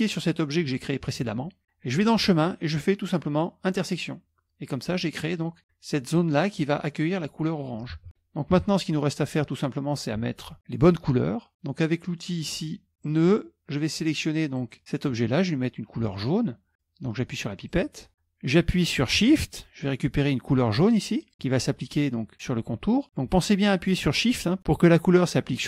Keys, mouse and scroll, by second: 0.1 shift+click, 2.1 click, 3.8 click, 5.5-6.6 drag, 8.0 ctrl+z, 8.6 KP_Subtract, 9.5-10.8 middle drag, 13.1 click, 14.6 click, 17.8 click, 21.3 shift+click.